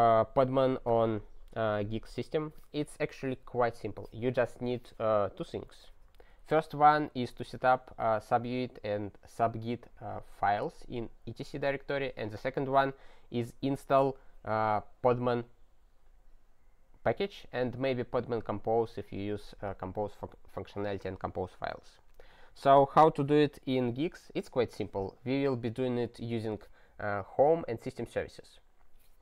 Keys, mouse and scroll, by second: 21.9-27.2 scroll down 1.